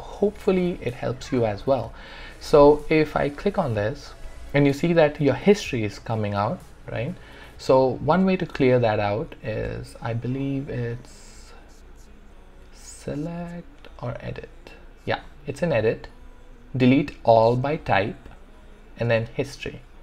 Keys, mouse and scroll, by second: 2.0 click, 9.7 click.